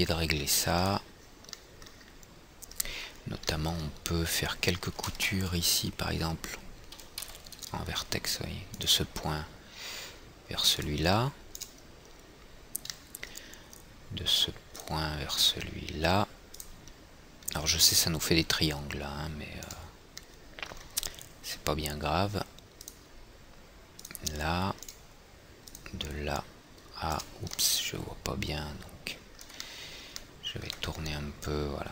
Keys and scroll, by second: 5.6 alt+c, 7.8 &.